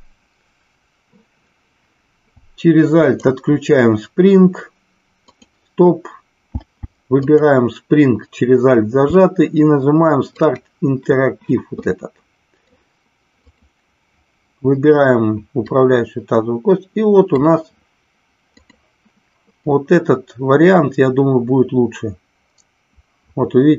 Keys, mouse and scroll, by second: 7.2 alt+click, 10.3 click, 12.0-12.6 middle drag, 13.5 click, 15.7-17.3 drag, 19.7-23.7 drag.